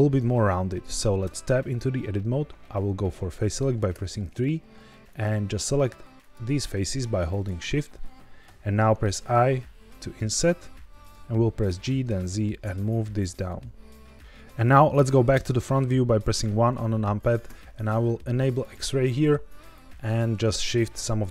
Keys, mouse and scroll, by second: 1.1 Tab, 3.8 3, 5.0 click, 6.1 shift+click, 7.2 shift+click, 9.0 i, 10.9 click, 11.6 g, 12.0 z, 14.2 Tab, 14.2 middle click, 15.2 KP_1, 16.1 scroll up 1, 18.5 click, 19.3 1, 19.6 click, 20.3 g, 20.4 z.